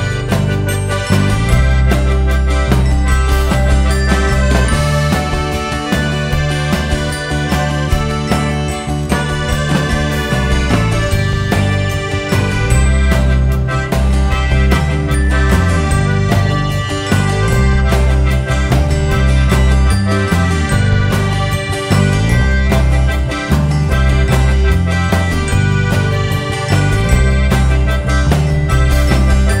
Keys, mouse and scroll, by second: 0.0 j, 0.4 click, 0.6 `, 1.6 shift+click, 2.0 z, 2.1 shift+click, 2.5 j, 2.7 Tab, 3.4 click, 4.0 alt+a, 4.1 `, 6.0 KP_Divide, 6.2 alt+a, 6.4 `, 7.8-8.2 scroll up 1, 10.0 KP_7, 12.5 click, 17.1 a, 18.6 s, 24.4-25.8 scroll down 2, 25.8-27.3 scroll down 1, 27.3-29.6 scroll down 1.